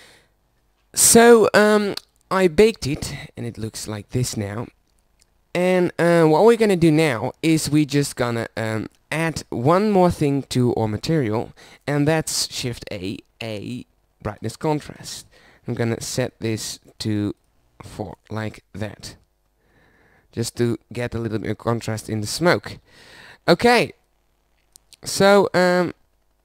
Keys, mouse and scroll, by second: 0.8 middle click, 6.9 middle click, 7.6-9.7 middle drag, 13.0 shift+a, 18.3 shift+z, 21.7 z, 24.2 shift+z.